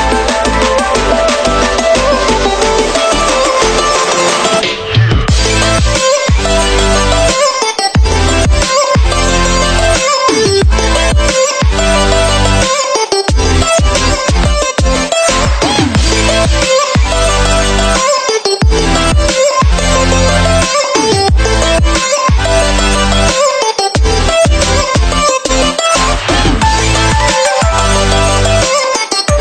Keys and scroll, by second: 0.1 ctrl+0, 0.4 ctrl+[, 9.1 ctrl+[, 19.7 ctrl+[.